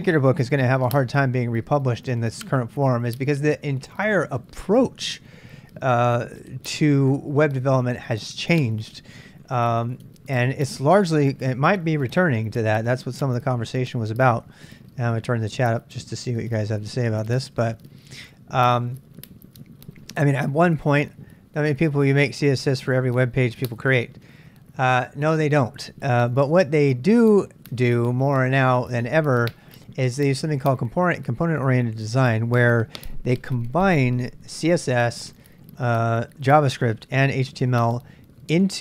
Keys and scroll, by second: 14.3 super+Tab, 14.5 super+Tab, 19.0 super+Tab.